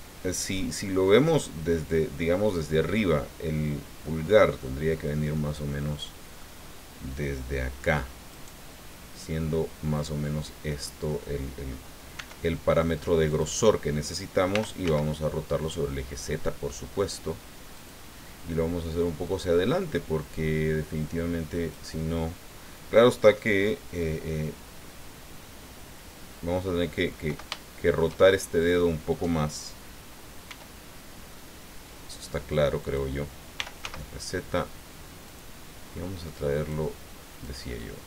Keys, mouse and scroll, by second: 5.3-6.5 middle drag, 8.3 right click, 10.2 click, 12.1 e, 13.3 click, 14.5 r, 14.8 z, 17.7 click, 19.2-21.9 drag, 27.5 shift+middle click, 30.5 e, 32.8 click, 33.6 r, 33.8 z, 35.3 click, 36.3 click, 37.4-38.0 drag.